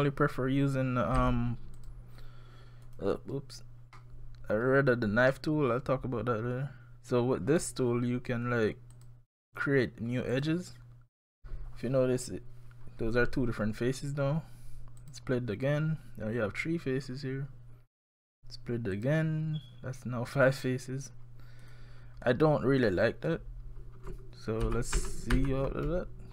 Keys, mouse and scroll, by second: 1.1 scroll up 1, 1.2 a, 1.8 click, 4.0 middle click, 5.3 middle click, 8.9 click, 24.6 ctrl+z, 25.0 ctrl+z, 25.3 ctrl+z.